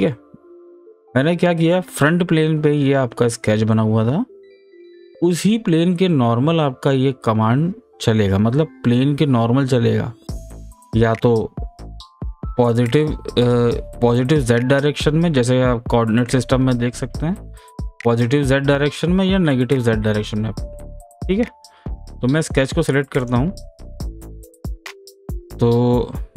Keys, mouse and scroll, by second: 2.0 click, 2.0 scroll up 1, 2.3 scroll down 1, 3.1 scroll up 1, 3.4-3.7 scroll down 1, 3.7-8.1 middle drag, 23.2 click, 25.4 click.